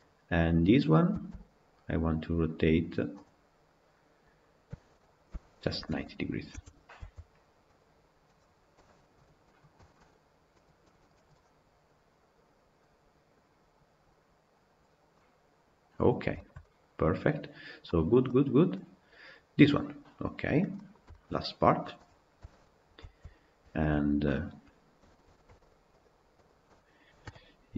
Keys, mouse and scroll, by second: 1.1 c, 4.5 a, 5.3 r, 6.9 Tab, 7.6 Left, 8.6 KP_Decimal, 9.3-14.3 middle drag, 14.3-15.0 drag, 15.0-18.4 middle drag, 18.4 scroll down 1, 18.5-19.9 middle drag, 19.9-20.4 scroll down 9, 20.6-21.6 middle drag, 21.6 click, 22.2 KP_Decimal, 23.0 Tab, 23.6 alt+click, 25.9 shift+click, 26.3 shift+click.